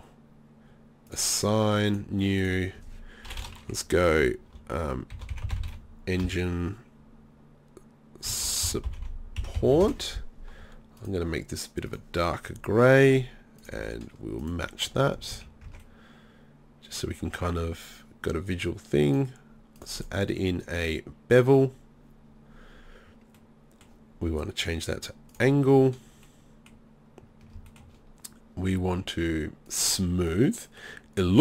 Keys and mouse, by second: 9.0 p, 15.2 z, 15.3 z, 15.7 Tab, 16.9 middle click, 22.9 middle click, 23.4-25.3 middle drag, 25.8-27.7 middle drag, 30.7-31.4 drag.